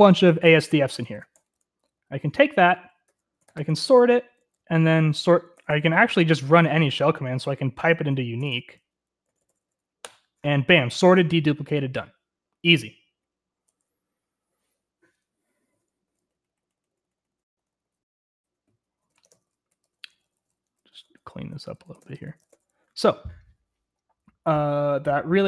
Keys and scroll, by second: 0.0-0.3 typing, 3.3-6.8 typing, 8.0-11.6 typing, 15.1 typing, 16.2-22.7 typing.